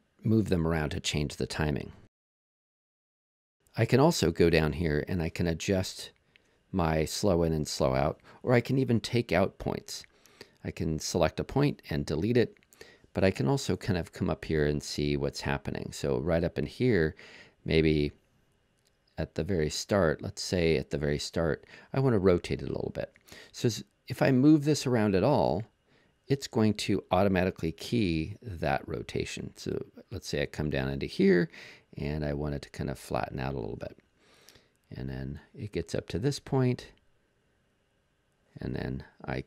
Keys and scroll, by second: 10.2 BackSpace.